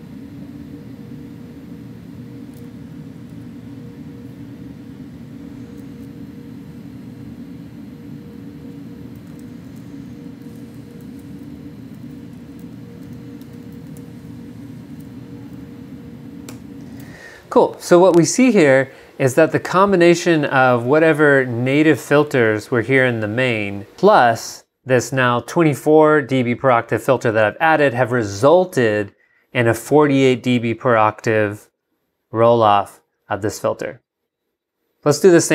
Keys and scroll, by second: 3.2 super+Up, 8.6-15.3 typing, 16.5 Return, 17.0 g.